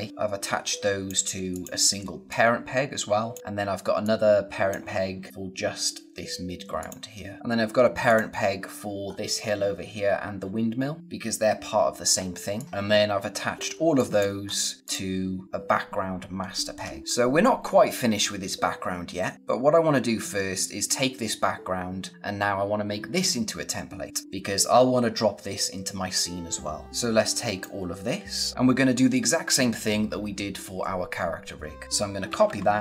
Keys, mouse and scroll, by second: 1.8 scroll down 1, 1.9 space, 2.2 click, 2.4 space, 3.4 scroll up 1, 4.2 click, 6.7 click, 7.5 scroll up 1, 8.0 click, 9.0-9.8 scroll up 1, 10.6-11.0 scroll down 1, 11.0 click, 12.0 scroll down 1, 12.2 space, 12.5 click, 12.6 space, 12.8-13.5 scroll up 1, 13.5 space, 13.9 click, 14.0 space, 14.4-14.8 scroll up 1, 14.8 click, 15.7 scroll down 1, 16.7-17.0 scroll up 1, 19.3-19.7 scroll down 1, 26.8 click, 31.8 ctrl+Num_Lock, 32.2 ctrl+c.